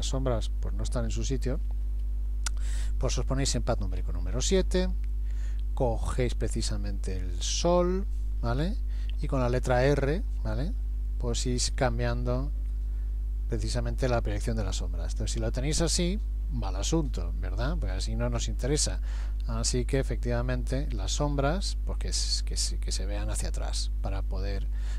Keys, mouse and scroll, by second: 4.0 KP_7, 9.7 r, 19.2 r, 24.6 middle click.